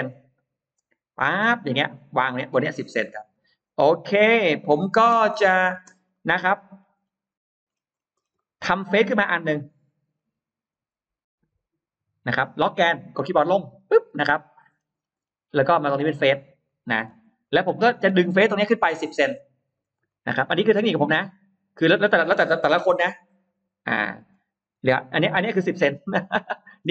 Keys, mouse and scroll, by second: 0.6-3.0 drag, 3.2 right click, 4.1-5.6 scroll up 7, 6.0 middle click, 6.3-7.5 scroll down 3, 7.5-8.2 scroll up 2, 8.2 middle click, 8.2-9.0 scroll down 3, 9.0-10.7 scroll up 8, 10.7 middle click, 10.7 r, 14.2 Down, 14.2 click, 14.6 middle click, 15.0 middle click, 16.5 click, 16.8 alt+middle click, 17.3 click, 17.6 click, 18.1 space, 18.2 click, 18.4 click, 19.6-20.6 middle drag, 20.5 m, 20.9 click, 23.4 typing, 24.0 Return, 24.6 space, 25.4-26.0 scroll up 1, 26.0 middle click.